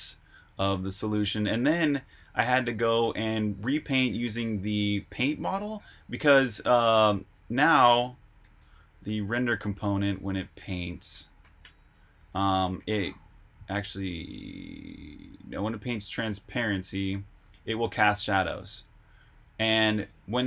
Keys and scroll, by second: 6.4 super+Tab, 7.6-15.5 typing, 11.9 Escape, 17.4-19.0 typing.